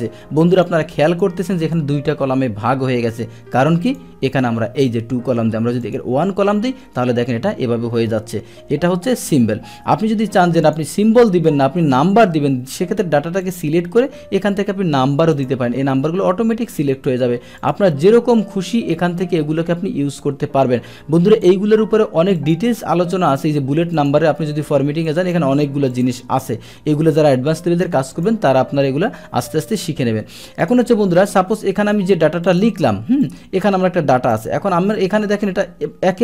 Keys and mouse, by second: 0.5-0.9 drag, 1.1 click, 3.9 click, 5.8 click, 10.6 click, 11.9 ctrl+a, 13.4 click, 15.4 click, 17.6 click, 21.3 click, 22.4 click, 24.0 click, 25.1 drag, 25.9 click, 28.1 click, 30.6 click, 32.5 click, 33.2-34.3 drag.